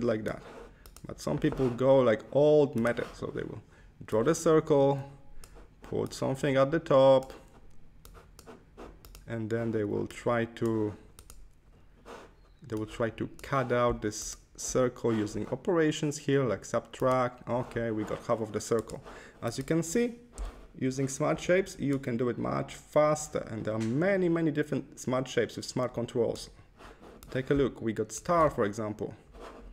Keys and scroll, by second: 20.2 Left, 21.2 Left.